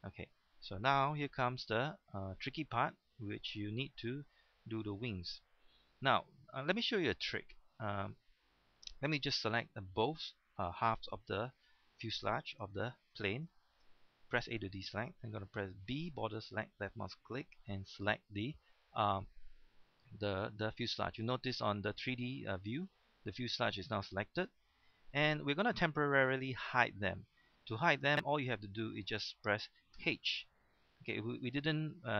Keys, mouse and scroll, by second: 0.7-1.4 scroll up 1, 1.6 shift+middle click, 2.2 scroll up 1, 2.7 shift+middle click, 12.8 shift+middle click, 13.2 scroll up 1, 14.3 shift+middle click, 14.3 a, 15.8 b, 16.5-18.4 drag, 21.2-26.5 middle drag, 30.0 h, 30.8 middle click.